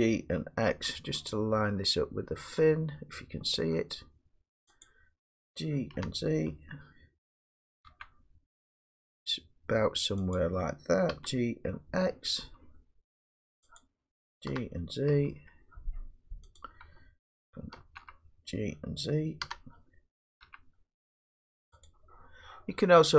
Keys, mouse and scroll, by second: 0.7 x, 4.8 click, 5.8-10.0 drag, 5.9 g, 7.9 z, 10.4 click, 11.1 g, 12.4 x, 13.8 click, 14.5 g, 15.1 x, 16.6 click, 17.8 ctrl+z, 19.4 g, 20.4 g, 21.9 click.